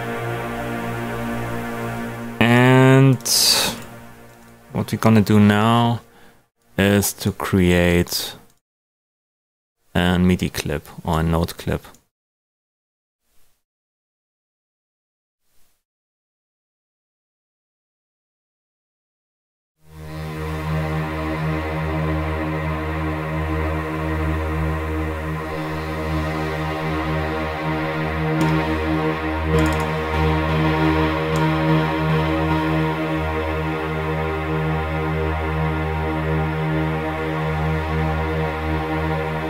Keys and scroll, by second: 24.9 space.